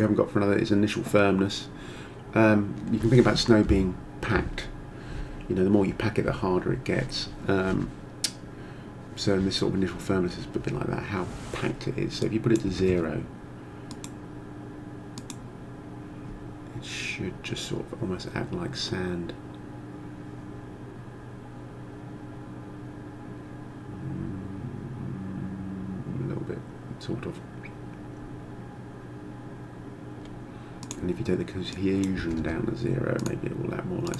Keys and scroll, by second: 12.7 0, 12.9 Return, 32.2 0, 32.4 Return.